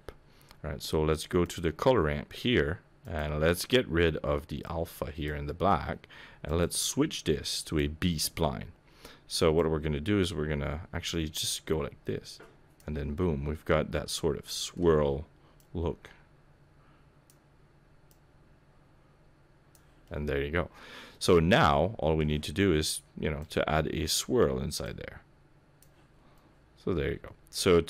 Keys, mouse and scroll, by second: 0.4-1.4 scroll down 2, 1.4 click, 1.7-3.0 scroll down 2, 3.0 click, 6.4 click, 9.6 click, 13.1 middle click, 15.6 click, 18.1 click, 20.0 middle click, 23.4 click, 24.8 click, 26.1-27.8 scroll down 3, 26.3 middle click.